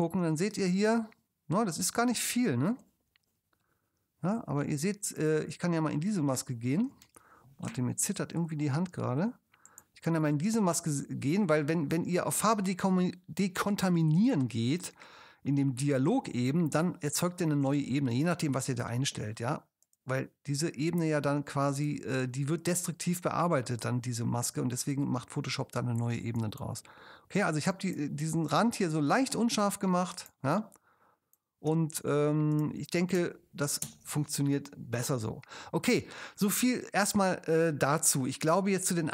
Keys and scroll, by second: 0.6 alt+space, 1.3 space, 26.2 space, 33.9 super+0.